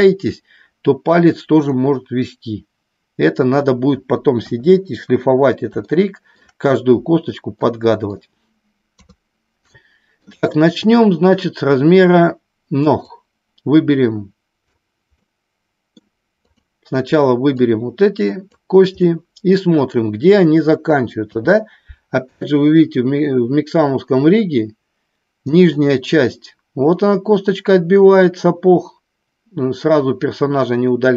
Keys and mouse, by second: 4.4 KP_1, 5.8 shift+middle click, 7.5 middle click, 9.0 KP_3, 9.6 shift+middle click, 13.0-14.7 drag, 15.1 middle click, 16.3 click, 17.6 click, 19.0 middle click, 21.2 KP_3.